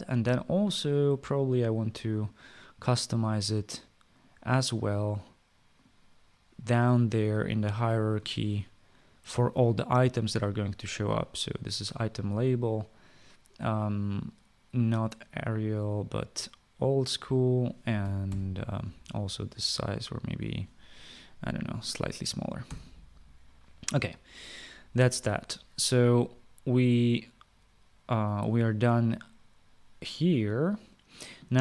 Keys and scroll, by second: 18.7 typing, 22.0-23.3 typing.